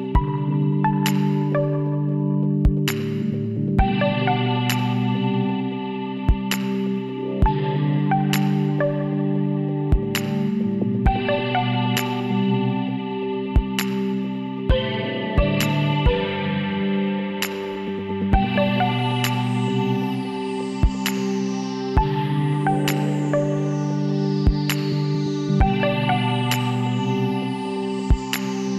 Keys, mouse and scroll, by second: 1.5 middle click, 5.0-8.5 middle drag, 9.4 middle click, 10.0 KP_1, 10.2 click, 11.7 middle click, 13.2-14.4 middle drag, 14.4 Tab, 17.9 KP_7, 19.2 middle click, 20.8-23.0 middle drag, 23.4-25.3 drag, 23.9-25.5 right drag, 25.5-28.0 middle drag, 25.5 scroll down 1, 25.7-26.1 scroll up 1.